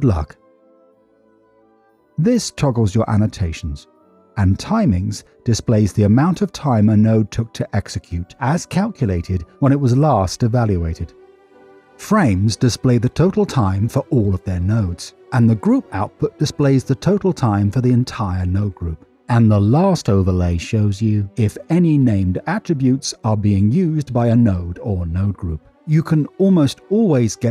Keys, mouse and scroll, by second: 11.7 Tab, 11.7 Tab, 19.4 Tab, 20.8-27.5 drag.